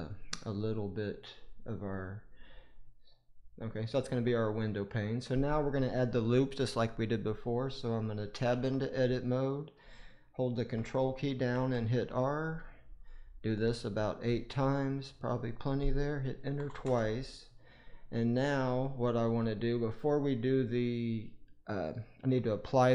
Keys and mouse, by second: 0.5-4.6 middle drag, 8.4 Tab, 11.4 ctrl+r, 18.4 middle click.